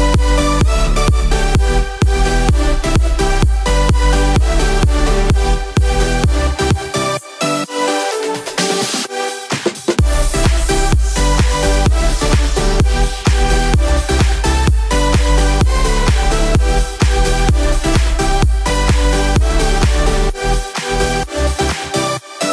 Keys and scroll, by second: 15.1 ctrl+z.